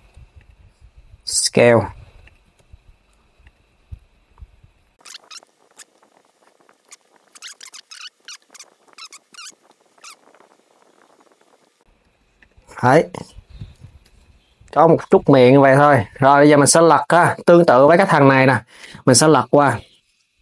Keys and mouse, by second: 0.0 click, 0.9 s, 2.2 g, 3.2 KP_3, 5.3 click, 5.4 KP_3, 5.4 g, 6.8 click, 6.8-11.2 typing, 7.3 Tab, 7.3 click, 8.4 click, 8.9 click, 9.5 click, 10.4 click, 11.2 click, 12.0 click, 13.4 s, 15.4 s, 15.8 click, 17.6 click.